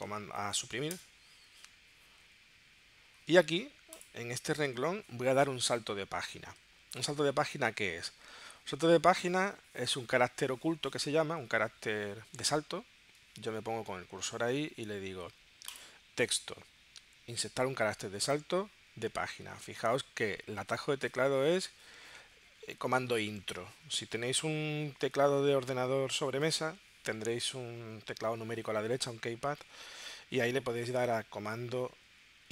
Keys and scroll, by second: 0.9 Delete.